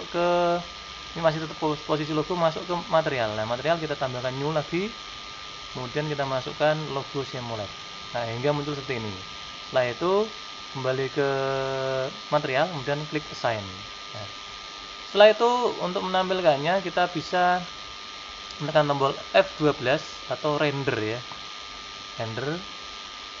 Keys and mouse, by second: 0.7-2.2 drag, 2.6-7.9 drag, 10.4-15.0 drag, 21.9-23.4 drag.